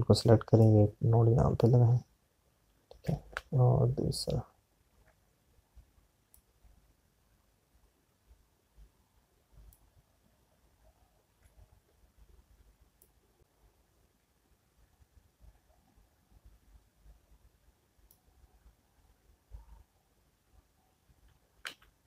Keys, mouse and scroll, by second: 2.3 click, 7.7 click.